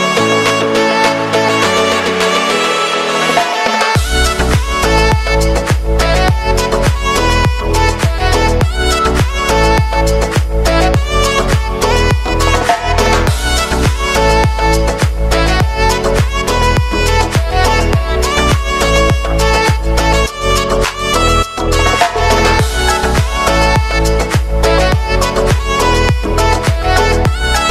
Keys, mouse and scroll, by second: 0.5 click, 1.8 alt+click, 2.4 space, 4.9 click, 6.7 space, 10.8 space, 13.3 click, 13.6 ctrl+a, 14.0 f, 15.7-21.7 drag, 21.9 ctrl+d, 22.5 [, 23.8 click, 25.2 Return, 26.5 click, 26.9 ctrl+d, 27.4-27.7 drag.